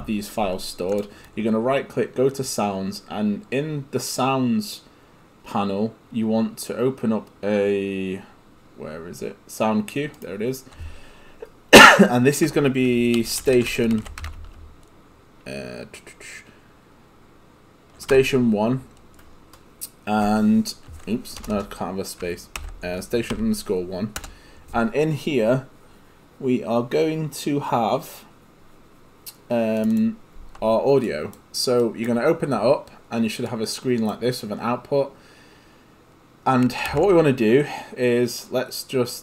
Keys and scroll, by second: 12.9-14.7 typing, 18.1 1, 21.4 BackSpace, 23.3 1, 24.2 Return, 36.9 ctrl+space.